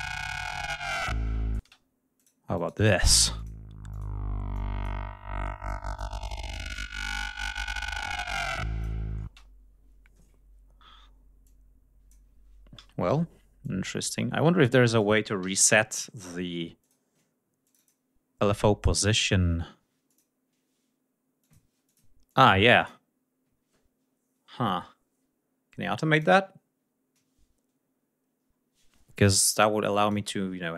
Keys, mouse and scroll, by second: 0.8 click, 1.5 space, 2.0 click, 2.4 click, 2.9 space, 3.2 click, 3.8 click, 4.4 click, 5.5 click, 6.1 click, 6.8 shift+right click, 8.4 click, 9.2 space, 9.3 ctrl+scroll down 2, 9.7 ctrl+scroll up 2, 11.3 click, 12.6 r, 13.5-15.1 drag, 15.3 ctrl+c, 16.7 click, 17.5 click, 20.0 click, 21.3 click, 21.8 click, 22.2 click, 22.6 click, 26.0 click, 28.3 scroll up 2, 29.9 click.